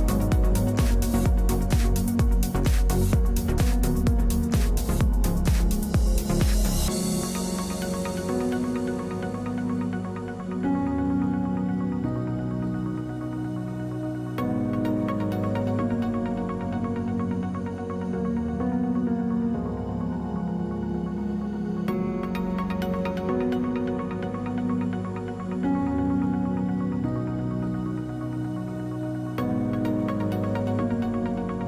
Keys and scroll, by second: 14.4 space, 15.3 space, 23.2 space, 23.8 space.